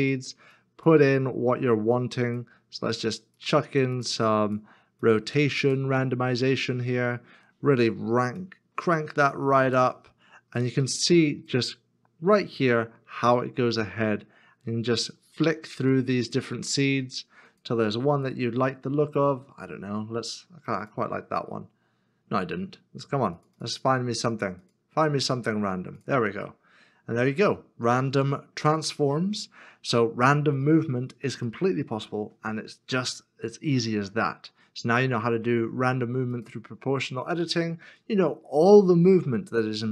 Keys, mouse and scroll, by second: 26.4 shift+middle click, 30.1 shift+middle click, 31.6 shift+middle click, 37.4 middle click.